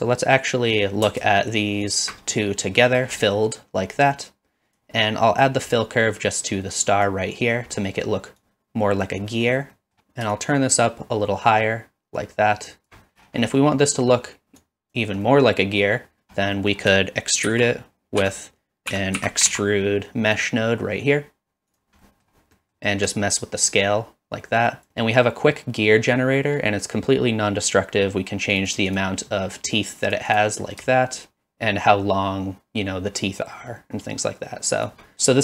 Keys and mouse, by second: 1.9 alt+shift+click, 2.4 middle click, 3.2 middle click, 4.1 click, 5.6-7.1 drag, 8.4 click, 9.4 middle click, 9.9 middle click, 10.4-12.9 shift+drag, 13.5 middle click, 13.9 middle click, 14.7 click, 15.3-15.8 middle drag, 16.7 middle click, 17.5 shift+a, 22.1 middle click, 22.6 middle click, 23.5-24.9 shift+drag, 28.7 click, 28.9 click, 30.1 click, 31.3-34.9 shift+drag.